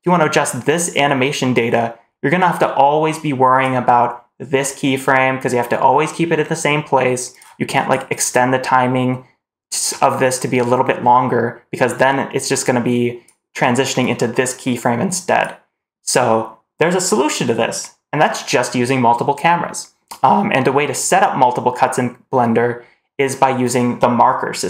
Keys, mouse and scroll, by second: 7.2 click, 7.6 click, 8.0 click, 8.3-9.7 drag, 11.8-13.1 drag, 13.9-15.3 drag.